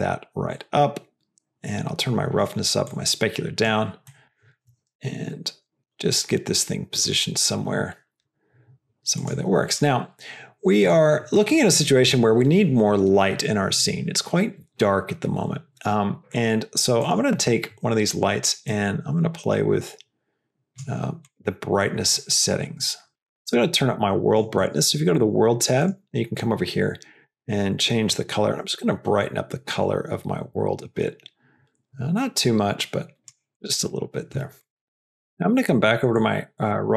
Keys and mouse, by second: 0.4-2.3 drag, 2.9 click, 4.1 middle click, 4.9 g, 7.6 g, 9.6 drag, 10.7 click, 17.0 click, 18.7-20.7 drag, 22.1 click, 25.0 click, 25.7 click, 34.5 click, 35.1 middle click, 36.0 click, 36.8 click.